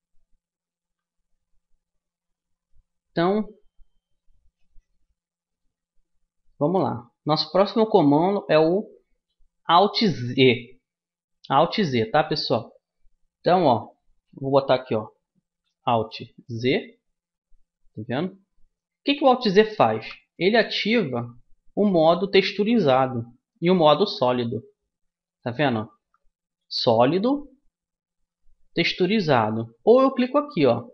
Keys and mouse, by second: 0.8 a, 16.4 alt+z, 17.5-19.9 middle drag, 19.9 alt+z.